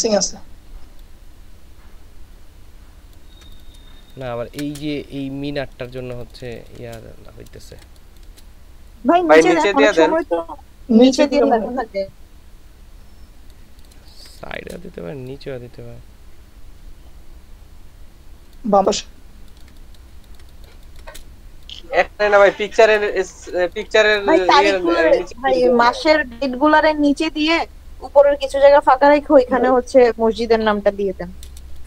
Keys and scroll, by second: 4.0 ctrl+shift+space, 5.8 ctrl+space, 6.5 ctrl+space, 7.6 space, 14.0 ctrl+space, 19.4 ctrl+space, 23.1 ctrl+space, 31.7 ctrl+space.